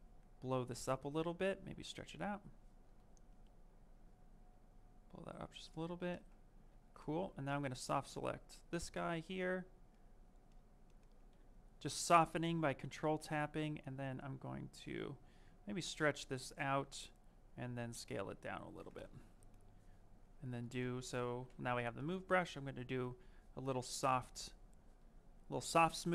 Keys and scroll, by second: 6.5 q, 8.5 ctrl+space, 11.1 w, 21.2 m.